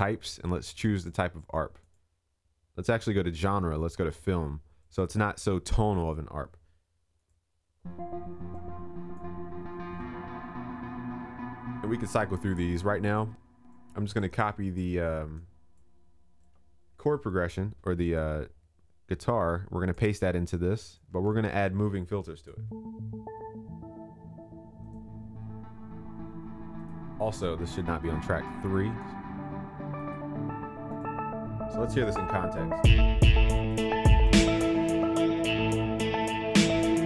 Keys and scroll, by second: 17.5 ctrl+c, 21.0 ctrl+v.